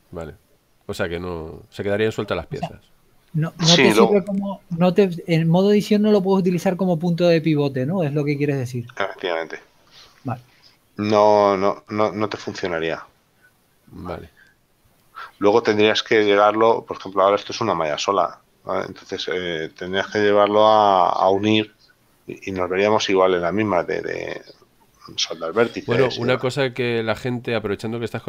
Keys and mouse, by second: 20.7 Tab, 20.9 middle click.